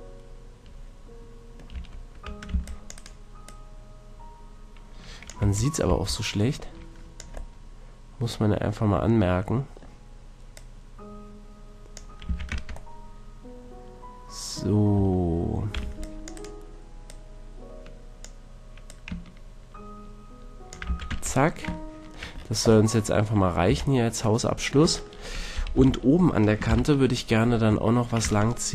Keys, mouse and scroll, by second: 1.7 Tab, 2.5 c, 5.4 z, 5.8 z, 6.0-7.8 drag, 10.5-12.5 drag, 12.2 a, 12.5 Tab, 12.9-14.5 drag, 14.9 Tab, 15.8 c, 17.0-20.7 drag, 20.8 a, 21.1 Tab, 21.3-23.0 middle drag, 23.1 middle click, 23.4 middle click, 23.6-24.0 middle drag, 23.6 a, 24.4-25.0 middle drag, 25.7 KP_3, 26.6 ctrl+KP_1, 26.7 middle click, 27.9 middle click, 28.2 Tab.